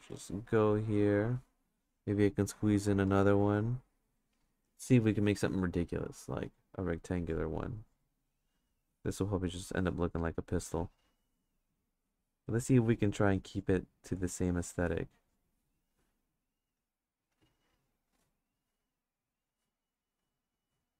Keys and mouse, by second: 0.1 click, 0.9 click, 2.5 click, 6.9 click, 7.8 click, 8.7 click, 9.6 click, 11.1 click, 11.9 click, 12.6-13.6 drag, 14.1 click, 14.5 click, 15.2 click, 16.7 click, 17.8 click, 18.5 click, 20.0 click.